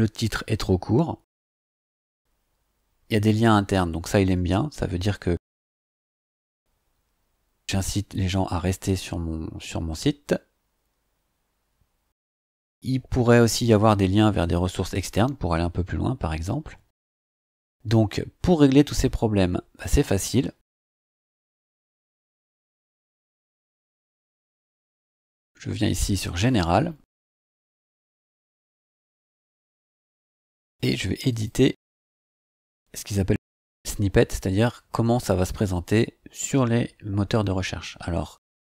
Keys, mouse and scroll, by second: 1.6 scroll down 2, 17.2-17.7 scroll down 4, 17.9 scroll up 2, 20.5-21.4 scroll up 4, 24.4 click, 31.3 click.